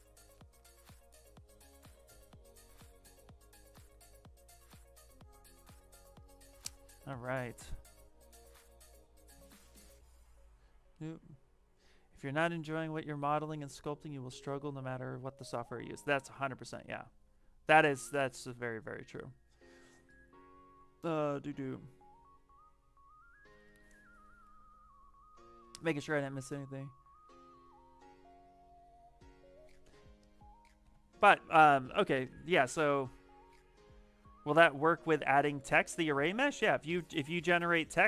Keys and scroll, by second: 30.7 shift+f.